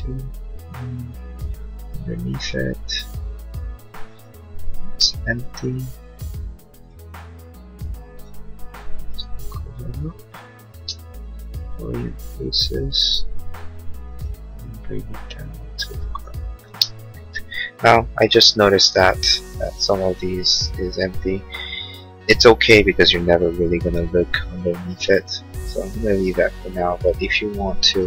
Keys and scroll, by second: 5.5 l, 9.5 p, 11.0 space, 16.6 space, 17.3 Escape.